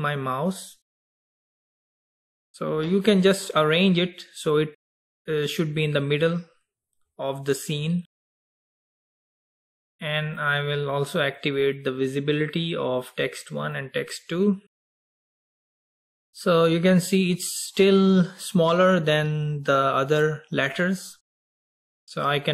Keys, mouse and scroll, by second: 10.4 click, 11.5 click, 13.1 click, 13.8 click, 15.7 click, 16.2-16.6 scroll down 4.